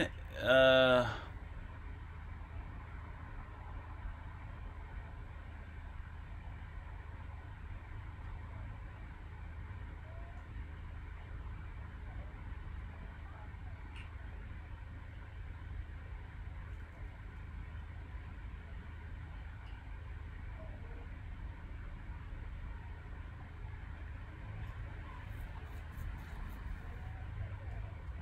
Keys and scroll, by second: 0.9-1.6 typing, 27.9 Escape, 28.0-28.2 typing.